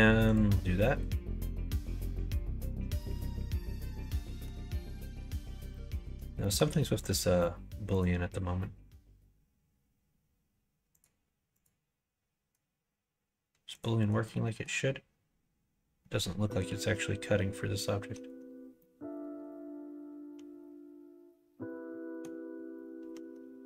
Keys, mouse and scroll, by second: 2.9-4.3 middle drag, 5.6 middle click, 6.3 shift+middle click, 7.8 click, 11.0 click, 13.6 click, 14.1 middle click, 18.7-22.1 middle drag, 23.3 Tab.